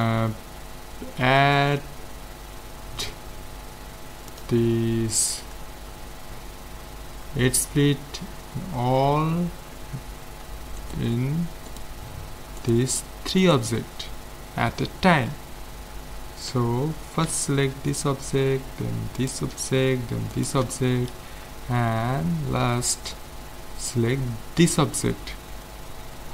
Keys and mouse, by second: 4.3-5.6 drag, 10.8-15.1 right drag, 16.6 a, 17.3 z, 17.9-22.1 right drag, 24.6-26.3 right drag.